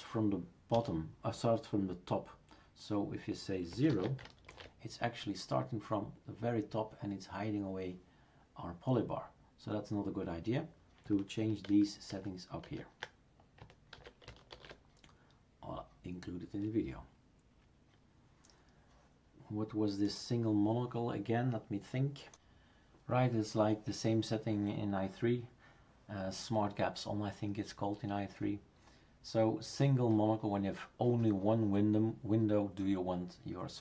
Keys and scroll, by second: 0.7 BackSpace, 3.9 ctrl+s, 4.5 shift+super+r, 11.6 ctrl+z, 12.1 ctrl+z, 12.6 ctrl+z, 13.9 ctrl+s, 14.5 shift+super+r.